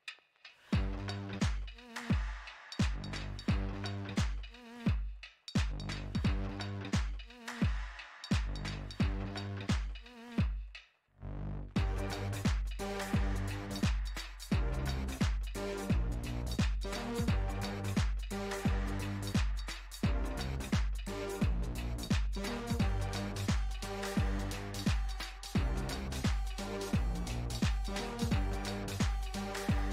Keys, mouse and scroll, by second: 0.1-4.3 middle drag, 4.3 f, 5.9-7.0 drag, 7.0 f, 8.2-11.0 drag, 14.6-17.1 middle drag, 17.1-20.1 drag, 20.1-21.5 middle drag, 21.5-25.9 drag, 25.9-28.8 middle drag, 28.8-29.9 drag.